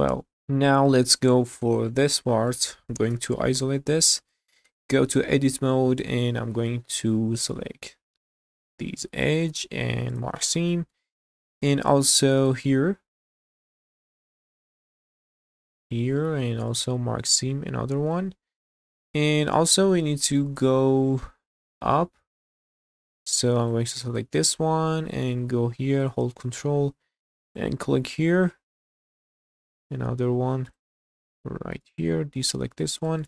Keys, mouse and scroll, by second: 0.4 click, 1.1 click, 2.0 click, 2.5 middle click, 3.1 /, 4.3 shift+middle drag, 4.7 Tab, 5.2 middle click, 6.5 2, 6.8-7.1 scroll up 1, 8.6 alt+click, 9.5 q, 10.7 shift+middle click, 12.4 alt+click, 13.1 alt+click, 14.5-14.8 scroll up 2, 15.6 alt+click, 16.1 q, 17.2 scroll down 1, 17.5 alt+middle click, 18.1-20.5 middle drag, 22.2-23.6 scroll up 2, 23.6 click, 24.3 shift+middle click, 25.5-26.3 scroll up 2, 27.4 ctrl+click, 28.1 scroll up 1, 28.6 scroll down 1, 28.9 shift+middle click, 30.7 ctrl+click, 31.8 ctrl+click, 32.8 scroll down 1, 33.1 shift+middle click.